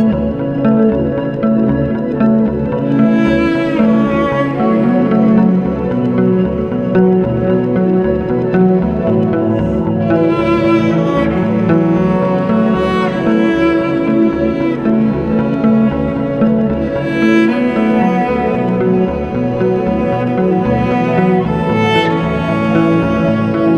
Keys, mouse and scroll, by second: 1.6 click, 4.9 scroll down 1, 9.8 click, 11.0 scroll up 1, 12.1 scroll down 1, 12.6-13.5 scroll up 1, 13.7 scroll down 1, 14.4-15.2 scroll up 1, 15.4 click, 16.5-17.8 scroll down 1, 19.1-20.3 scroll down 1, 20.8-21.8 scroll down 1.